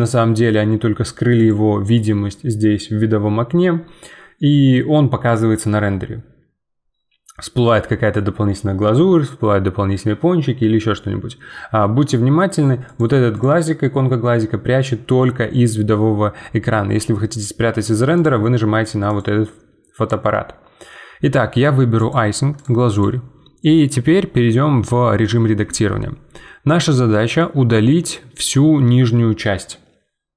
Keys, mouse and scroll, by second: 1.4-4.9 drag, 12.8-16.3 drag, 18.1-22.8 drag, 25.2 middle click, 25.6 Tab, 26.9-30.0 middle drag.